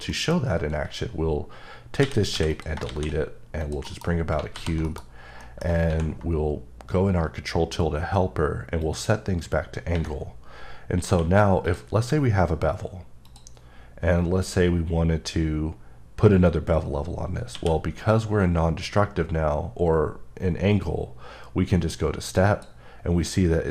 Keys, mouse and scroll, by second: 1.5 scroll, 2.0 a, 2.5 click, 2.9 shift+a, 3.6 click, 3.8 KP_Decimal, 4.5 alt+g, 4.8 KP_Decimal, 5.2-5.6 scroll down 2, 8.8 click, 11.6 click, 13.2 click, 17.5 click, 22.2 q, 22.3 click.